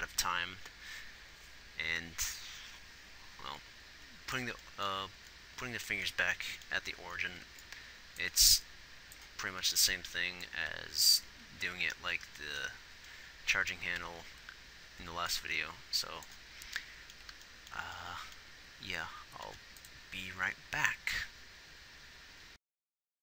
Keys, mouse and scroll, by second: 5.9 z, 7.0-9.1 typing, 13.6 b, 13.6 z, 20.2 ctrl+s, 22.6-23.2 typing.